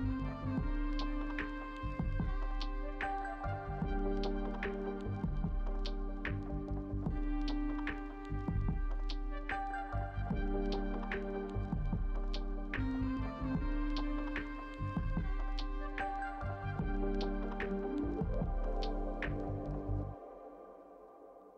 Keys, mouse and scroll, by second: 9.3 ctrl+g.